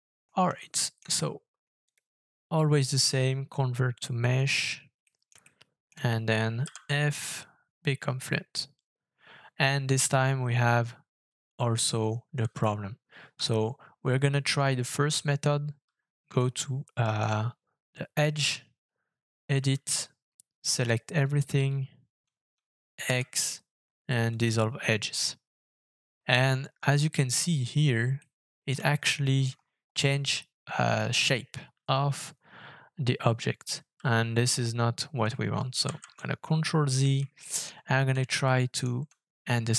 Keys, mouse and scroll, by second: 0.1-0.5 scroll up 5, 0.6 shift+middle click, 5.0 middle click, 5.4 shift+middle click, 6.6 f, 13.3-15.8 Tab, 16.5 shift+middle click, 19.5 a, 23.0 x, 28.2 middle click, 28.9 shift+middle click, 29.4-29.9 shift+scroll up 4, 35.8 ctrl+z, 36.6 ctrl+middle click, 37.4 shift+middle click, 37.7 shift+scroll up 1, 38.1 shift+middle click.